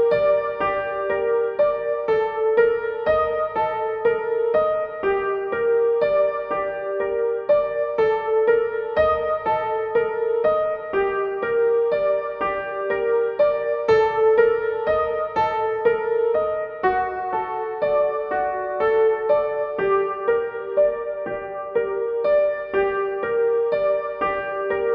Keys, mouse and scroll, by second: 8.4-18.9 drag, 18.9 z, 19.5-24.9 drag.